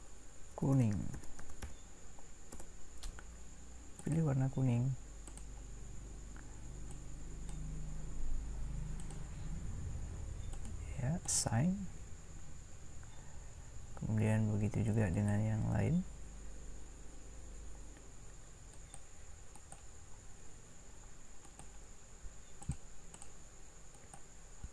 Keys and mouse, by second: 4.0-5.3 drag.